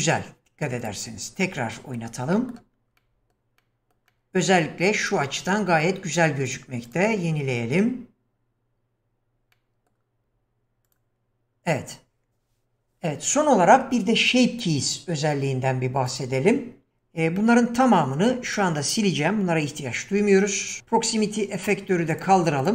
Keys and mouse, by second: 0.8 click, 1.4-2.0 middle drag, 2.3 middle click, 3.0-3.4 middle drag, 3.6-4.0 middle drag, 4.1-4.5 middle drag, 5.3-5.7 middle drag, 6.9 click, 9.6-9.9 middle drag, 10.9 click, 16.1 click, 17.4-18.0 middle drag, 20.1 x, 22.1 click, 22.6 click.